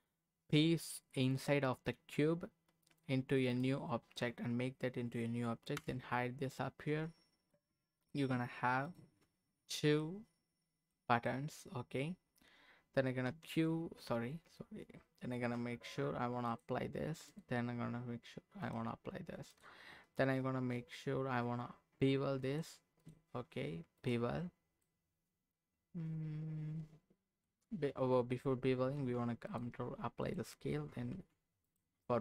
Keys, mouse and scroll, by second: 2.8 click, 3.5 click, 5.8 h, 7.1-7.5 scroll up 1, 7.5 middle click, 8.8 click, 9.6-10.0 scroll down 1, 10.0 middle click, 11.0 scroll down 1, 11.3 middle click, 11.8-12.8 scroll up 1, 12.8 scroll up 1, 13.3 q, 16.5 click, 17.3 click, 18.6 click, 19.5 click, 20.1-21.4 right drag, 22.4 click, 24.1 click, 24.8-27.5 middle drag, 29.0 ctrl+a, 30.2 click, 31.1 ctrl+a.